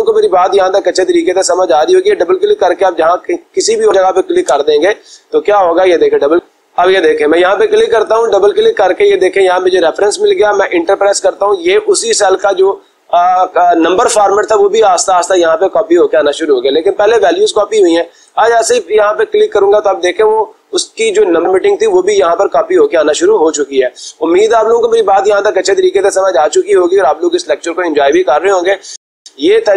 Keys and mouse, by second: 0.3-1.5 drag, 1.8-4.0 drag, 4.7 Escape, 6.4 click, 7.0 click, 8.6 click, 9.1 click, 10.7 Return, 15.6 click, 15.9 click, 18.4 Return.